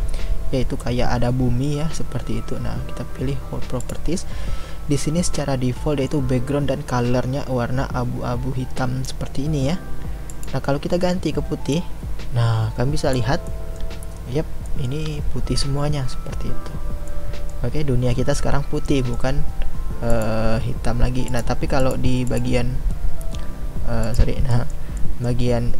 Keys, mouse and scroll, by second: 11.7 click, 13.5-20.1 middle drag, 20.1 click, 21.3 click, 22.7 click, 24.0 click, 24.5-25.7 middle drag.